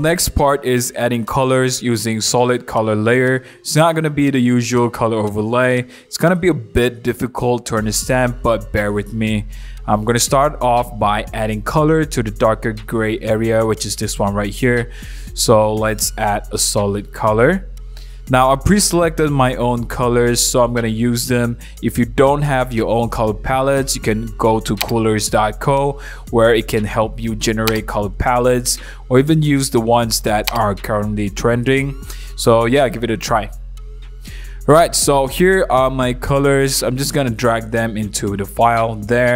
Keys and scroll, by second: 5.1 super+1, 5.9 super+0, 6.2 super+-, 10.2 super+1, 34.5 super+a, 36.3 super+c, 36.6 super+c, 37.0 super+d, 38.3 super+v.